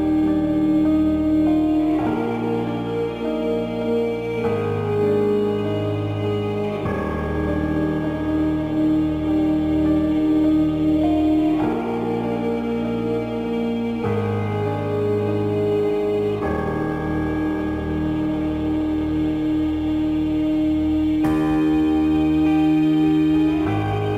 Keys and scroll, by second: 1.8 space, 12.9 ctrl+j, 14.0 Down, 22.2 space.